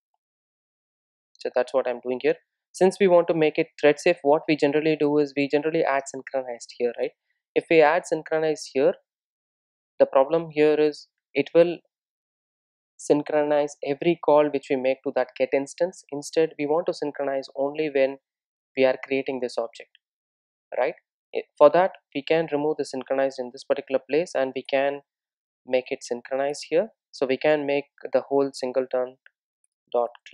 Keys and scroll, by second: 7.0 Return, 26.6 Return.